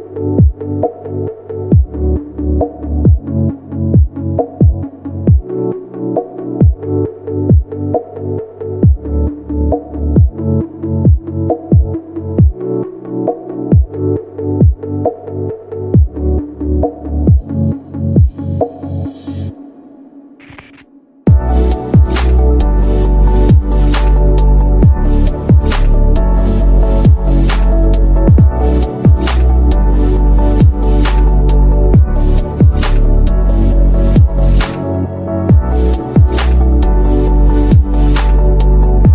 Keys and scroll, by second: 9.8 shift+Page_Up, 10.6 ctrl+Page_Down, 21.1 shift+F2.